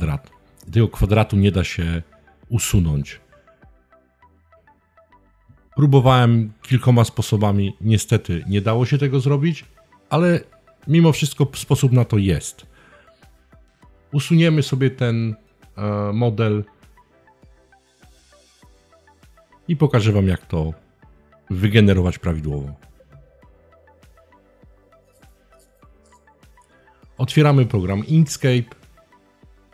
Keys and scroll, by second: 22.7 BackSpace.